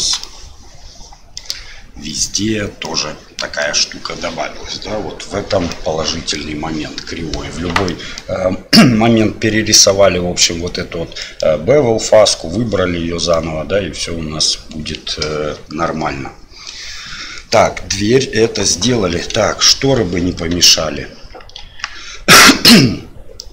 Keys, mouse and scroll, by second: 0.2-1.3 shift+middle drag, 2.8 middle click, 5.7 middle click, 7.8 middle click, 11.1 middle click, 13.3-14.4 middle drag, 20.5 KP_1, 21.5 KP_3, 23.3 middle click.